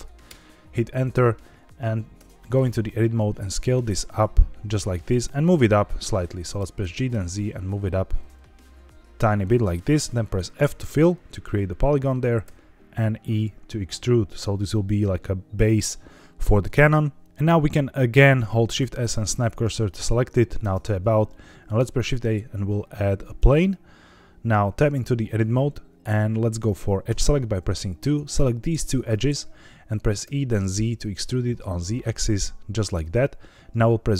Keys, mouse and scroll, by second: 2.1 Tab, 3.1 s, 4.7 click, 6.7 g, 7.0 z, 9.5 click, 10.6 f, 12.4 e, 15.5 click, 18.4 shift+s, 20.5 Tab, 21.2-21.6 middle drag, 21.7 shift+a, 24.8 Tab, 27.0 2, 28.1 click, 28.9 shift+click, 30.2 e, 30.7 z, 32.9 click.